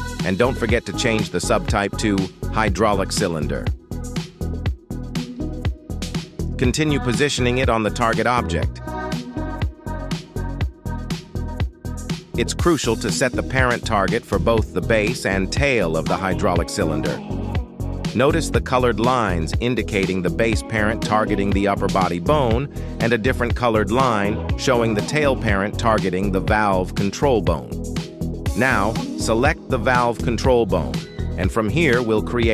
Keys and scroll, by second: 4.8 Tab, 6.4 shift+s, 7.8 Tab, 8.7 shift+s, 9.2 Tab, 10.3 shift+s, 11.7 Tab, 13.3 shift+s, 20.8 g, 20.9 Escape, 24.3 g, 25.4 Escape, 27.6 g, 28.3 Escape.